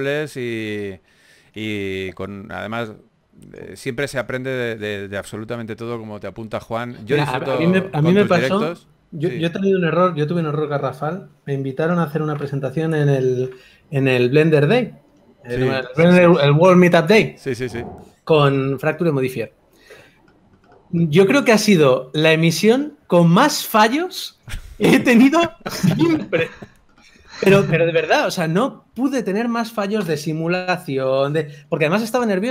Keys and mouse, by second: 0.4 s, 1.1 g, 1.8 r, 3.1 KP_1, 4.3 g, 4.7 r, 5.3 g, 7.9 KP_3, 10.6 Tab, 11.2 a, 11.6 alt+s, 13.0 Tab, 13.2 s, 14.6 g, 15.6 g, 16.5 g, 18.3-19.4 drag, 18.7 r, 19.5 g, 20.1 a, 22.3 right click, 23.0 Tab, 23.6 right click, 24.1 z, 27.7 a, 27.7 c, 27.7 z, 28.2 s, 30.4 s, 30.4 o.